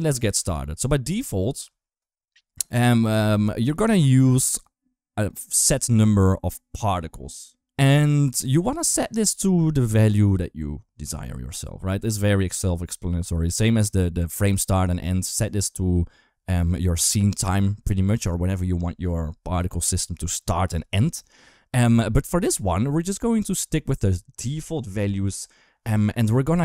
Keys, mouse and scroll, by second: 0.2 space, 4.5-5.1 drag, 24.2 middle click, 25.0 KP_1.